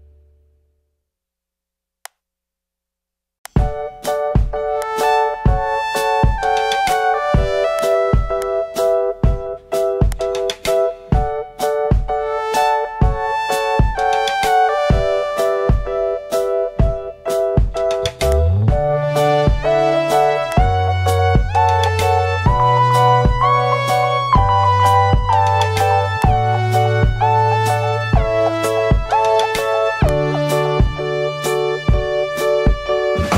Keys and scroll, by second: 1.2 alt+super+z, 3.4 alt+super+z, 10.7 super+0, 16.8 super+t.